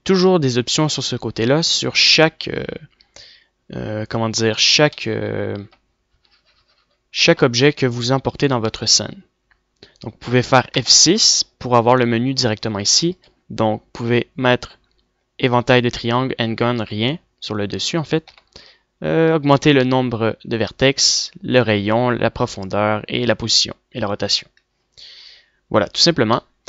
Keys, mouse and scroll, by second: 3.4 click, 5.9-6.4 middle drag, 8.0-9.6 middle drag, 12.3 F6, 19.8 F6.